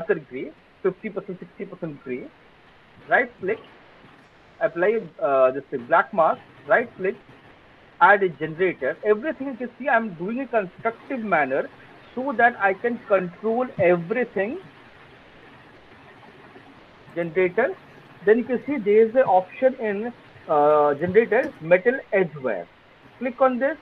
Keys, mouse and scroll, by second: 2.7 click, 4.2 click, 6.2 right click, 7.8 click, 14.3 click, 15.8 click, 16.9 click, 22.7 click.